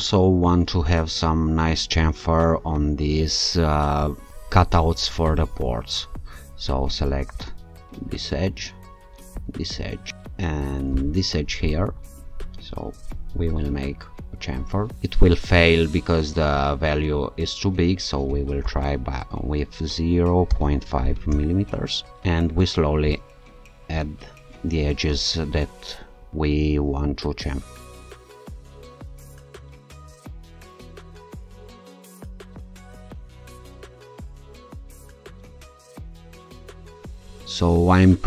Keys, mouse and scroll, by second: 2.1-2.7 alt+scroll up 2, 2.7-3.1 alt+scroll up 1, 7.4 alt+shift+click, 9.4 ctrl+click, 11.0 ctrl+shift+click, 13.4 click, 15.8-16.5 scroll down 2, 18.6 0, 20.6 5, 21.3 Return, 23.1 click, 26.2 alt+click, 27.8 scroll down 1, 28.3 click, 28.5 click, 28.8 click, 29.0 click, 29.2 click, 29.6 alt+click, 29.9 click, 30.1 click, 30.3 click, 30.5 click, 30.7 click, 31.0 scroll down 1, 31.3 alt+scroll up 1, 31.9 alt+click, 32.2 ctrl+click, 32.4 ctrl+click, 32.7 ctrl+click, 32.9 scroll down 2, 33.5 shift+scroll up 2, 34.0 shift+click, 34.5 click, 34.9-35.5 scroll down 4, 35.1 click, 35.6 click, 36.0 scroll down 2.